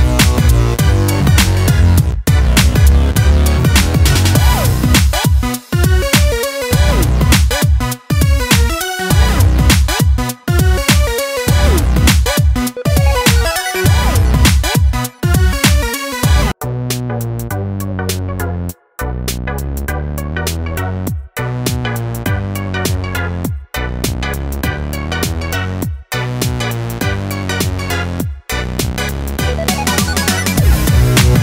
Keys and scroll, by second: 4.6 ctrl+d, 19.7 ctrl+r, 24.9 ctrl+r.